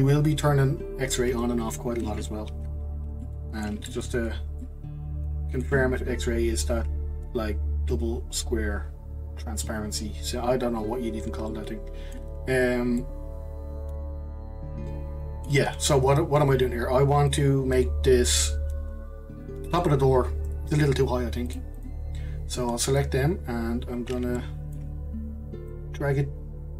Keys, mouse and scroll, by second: 2.5 ctrl+z, 3.2-4.3 middle drag, 4.3 scroll up 1, 4.6-7.7 middle drag, 11.5-12.6 middle drag, 12.6-13.0 scroll down 2, 13.0-16.0 middle drag, 17.3 click, 21.5 click, 22.5 click, 23.3-24.3 scroll up 1, 24.3-25.7 shift+middle drag, 25.7 click.